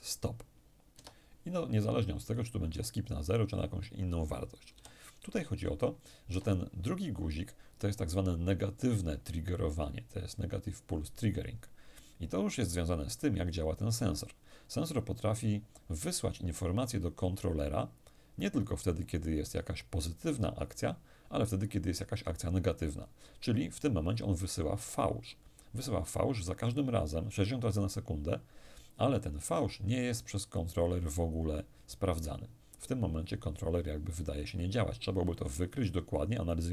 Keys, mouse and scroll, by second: 0.6 Escape, 1.9 click, 4.4 p, 5.9 Escape.